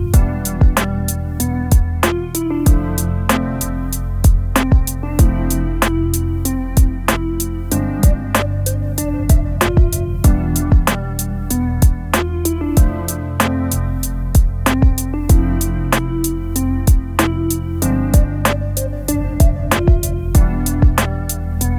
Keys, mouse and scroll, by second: 7.4 alt+scroll up 2, 8.2-8.7 alt+scroll up 1, 11.8-12.1 alt+scroll down 2, 16.9 alt+scroll down 4, 17.4 space, 17.9-18.4 space, 18.9 alt+scroll down 1, 19.4 space, 20.0-20.5 space, 20.6 space, 21.1 alt+scroll up 2.